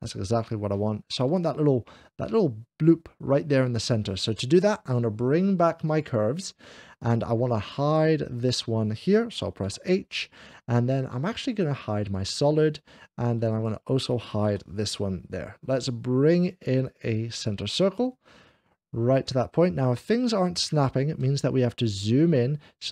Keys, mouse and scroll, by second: 0.1 right click, 1.0 middle click, 5.7 click, 6.8 click, 8.3 click, 9.5 h, 12.0 click, 13.3 click, 14.5 h, 17.3 click, 21.0-22.1 ctrl+middle drag.